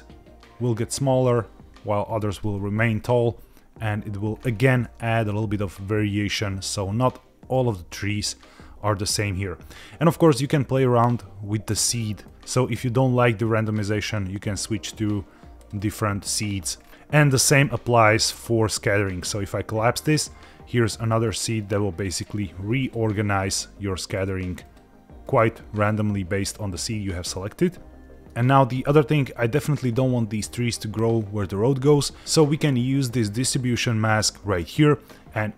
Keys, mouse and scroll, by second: 2.7-3.6 scroll down 2, 3.6 scroll down 1, 4.3-4.9 scroll up 3, 5.0 shift+middle click, 5.5-7.5 middle drag, 12.2 click, 13.9 click, 14.8 click, 15.5 click, 16.7-17.3 scroll up 2, 17.3 scroll down 6, 19.1 click, 19.1 scroll up 1, 21.2 click, 22.0 click, 22.7 click, 24.1 click, 24.6 click, 25.2 click, 28.2 shift+middle click, 28.4 scroll down 2, 28.7 middle click, 29.4-29.9 scroll up 1, 29.9-31.0 scroll down 1.